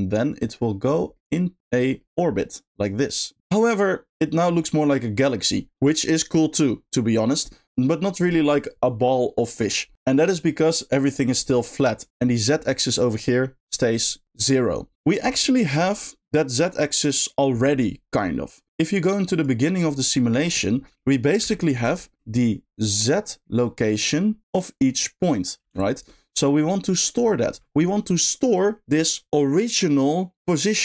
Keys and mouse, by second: 1.1 middle click, 1.9 middle click, 9.9 middle click, 10.4 middle click, 11.5 middle click, 12.1 middle click, 19.3 click, 22.0 shift+middle click, 22.9-24.4 drag, 25.7 ctrl+click.